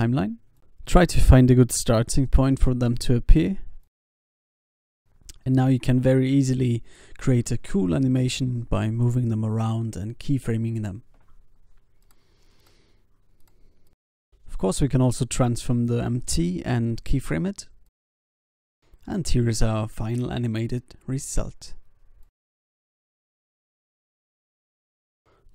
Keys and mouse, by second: 0.8 g, 1.0 click, 1.8 s, 2.4 i, 2.9 alt+a, 4.3 alt+a, 4.6 ctrl+s, 6.0 g, 7.0 alt+a, 7.9 alt+a, 8.2 ctrl+s, 10.3 x, 11.1 i, 13.2 r, 16.1 i, 16.6 alt+a, 17.0 ctrl+s, 24.0 ctrl+s.